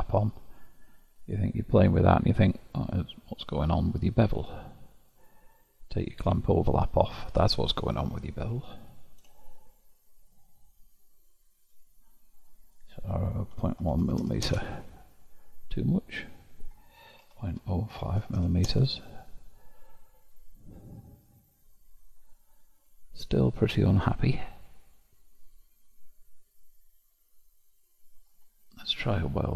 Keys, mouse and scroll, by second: 1.3-6.4 drag, 7.8-12.5 drag, 12.8-14.2 drag, 14.2 m, 16.5-18.4 drag, 18.4 m, 20.0-21.0 scroll up 1, 21.0-21.6 scroll up 1, 21.6-22.4 scroll up 10, 22.4-25.4 middle drag, 27.8-28.8 drag.